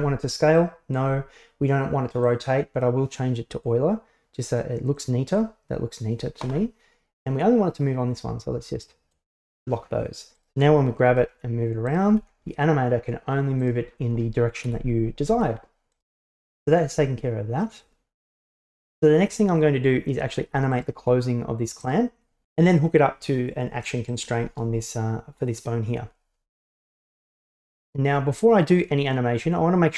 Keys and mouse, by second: 0.6 click, 2.3-3.7 drag, 5.0 click, 8.9 click, 10.4-11.1 right drag, 11.1 g, 11.9 right click, 12.1 g, 14.7 KP_1, 15.4 g, 16.3-16.6 middle drag, 17.1-17.9 middle drag, 20.8 right click, 21.9 right click, 24.1 right click, 28.8 right click.